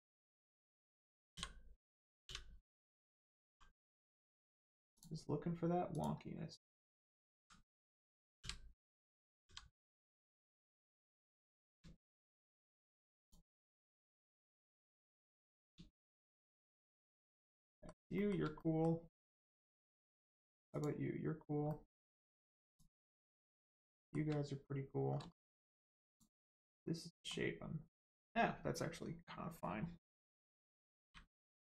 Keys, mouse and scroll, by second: 0.4 click, 2.2 u, 3.4 g, 4.2 click, 6.9 alt+click, 8.4 u, 9.4 g, 10.7 click, 11.3 scroll down 1, 11.9 shift+middle click, 12.3 scroll down 1, 13.2 click, 13.9-14.3 scroll down 1, 14.3 middle click, 15.9 shift+middle click, 16.6 middle click, 16.7 middle click, 17.0 shift+middle click, 17.3-17.6 scroll up 1, 17.6 middle click, 18.1 shift+middle click, 18.3 scroll down 1, 18.5 middle click, 20.7 click, 21.7 middle click, 22.7 click, 23.3 scroll up 1, 23.9 shift+middle click, 26.1 click, 26.7 middle click, 28.2-30.1 scroll down 1, 30.5 scroll down 1, 30.9 u.